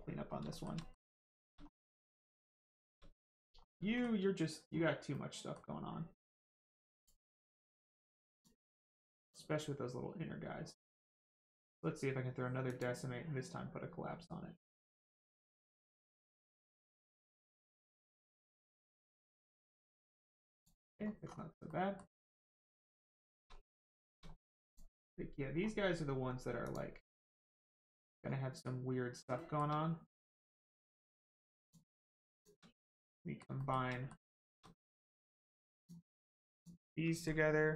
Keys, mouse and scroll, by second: 0.2 scroll down 1, 0.5 shift+middle click, 0.8 middle click, 0.8 middle click, 1.3 shift+middle click, 1.6-1.9 scroll up 1, 2.1 shift+middle click, 3.2 click, 3.5 scroll down 1, 3.9 shift+middle click, 5.1 middle click, 7.0 click, 9.2 click, 11.6 click, 14.6 click, 20.9 scroll down 1, 21.6 middle click, 22.4 click, 22.8 middle click, 23.2 shift+middle click, 23.4-23.8 scroll up 1, 23.9 shift+middle click, 24.6 click, 25.5-26.6 scroll up 1, 26.6 click, 27.2 scroll up 1, 27.5 shift+middle click, 28.3 scroll down 1, 29.4 shift+middle click, 29.8 scroll up 1, 31.6 click, 32.4 shift+click, 32.8 scroll down 1, 33.0 middle click, 33.6 shift+middle click, 33.9 middle click, 34.0 middle click, 34.4 shift+middle click, 34.6 middle click, 35.0-35.3 scroll up 1, 35.8 shift+click, 36.5 shift+click, 37.3 ctrl+click.